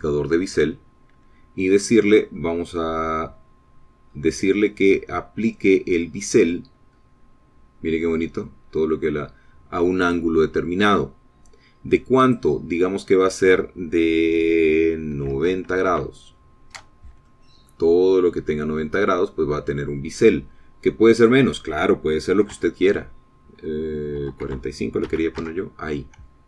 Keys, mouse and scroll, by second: 0.6 click, 4.7-5.6 scroll down 4, 8.0-8.8 scroll down 4, 11.2 click, 13.5 click, 16.3 KP_9, 16.5 KP_0, 17.1 KP_Enter, 18.5 middle click, 19.1-19.5 scroll down 1, 19.5-21.1 middle drag, 21.3 scroll up 2, 21.4 middle click, 22.4 click, 23.7 KP_4, 23.8 KP_5, 25.4 BackSpace.